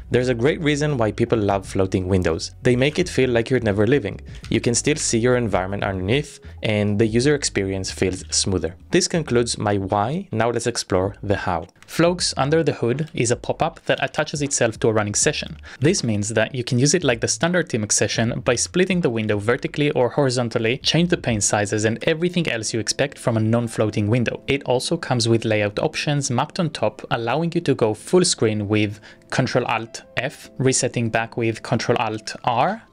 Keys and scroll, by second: 1.5 p, 3.2 p, 4.5 Up, 5.2 Return, 8.5 p.